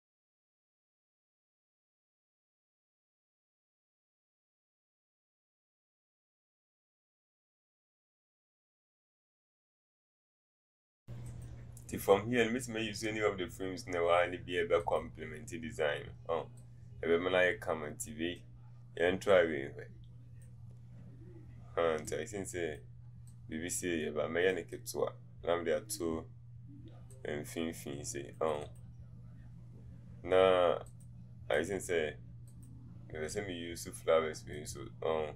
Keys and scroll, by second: 10.3 c, 10.7 ctrl+v.